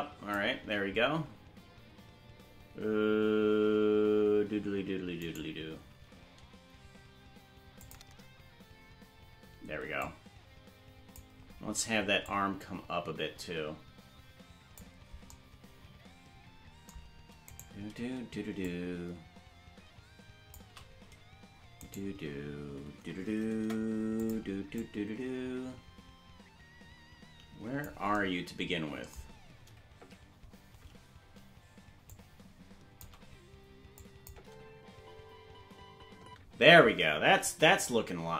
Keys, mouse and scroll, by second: 10.0-11.2 drag, 10.0 right click, 10.0 g, 12.2-14.8 drag, 17.6 right click, 18.6-20.6 shift+drag, 21.8 right click, 23.6 Delete, 24.8-27.9 drag, 30.0 Left, 32.1 shift+click, 34.0 click, 34.3 space, 36.2 space, 37.5 KP_0.